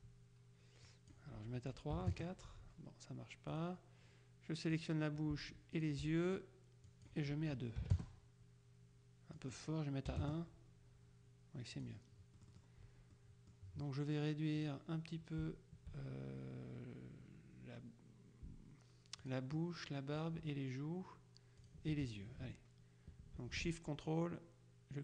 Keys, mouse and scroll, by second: 1.0 click, 2.1 KP_4, 2.2 KP_Enter, 3.6 click, 4.8 click, 5.9 shift+click, 6.9 click, 7.9 KP_2, 8.0 KP_Enter, 9.5 click, 10.2 KP_1, 10.3 KP_Enter, 11.9 click, 12.5-14.1 drag, 14.7 click, 19.3 shift+click, 20.2 click, 21.7 click, 24.1-25.0 drag.